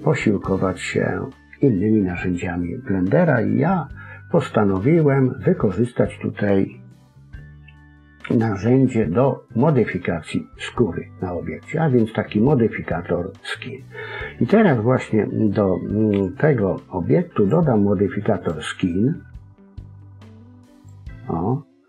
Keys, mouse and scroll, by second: 17.3 click, 18.3 click.